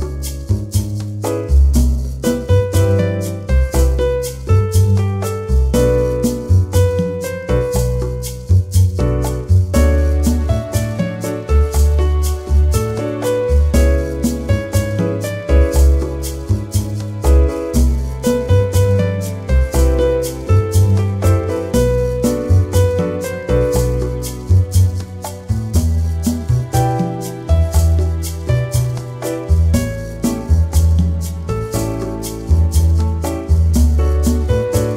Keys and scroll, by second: 4.4 ctrl+Return, 8.2 alt+BackSpace, 9.5 ctrl+d, 9.9 v, 30.9-32.2 typing, 32.7 Return.